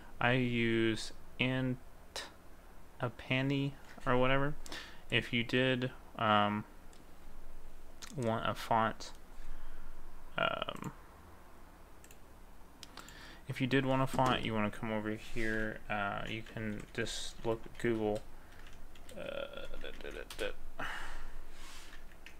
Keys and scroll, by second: 18.1 space, 18.6 BackSpace, 19.8-20.8 typing.